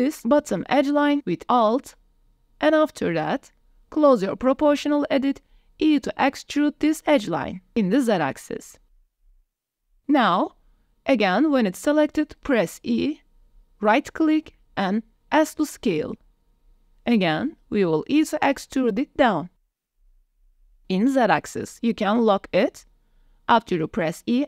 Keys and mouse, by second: 1.4 alt+click, 2.0 middle click, 2.8 middle click, 3.7 KP_1, 4.2 g, 4.2 z, 5.6 click, 5.9 e, 6.3 z, 7.9 click, 8.3 middle click, 11.7 e, 14.8 click, 15.5 s, 18.3 click, 19.5 e, 20.5 z, 23.5 click, 24.3 middle click.